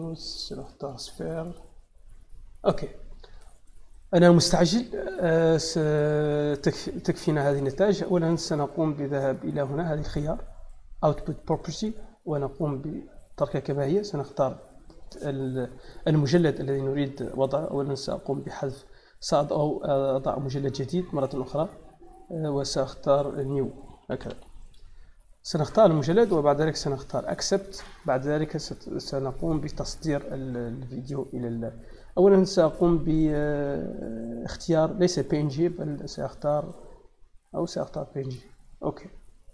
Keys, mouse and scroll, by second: 0.7 click, 11.5 click, 14.7 click, 17.1 right click, 17.9 click, 21.1 click, 23.5-24.7 typing, 25.3 click, 25.4 click, 27.2 click, 35.6 click.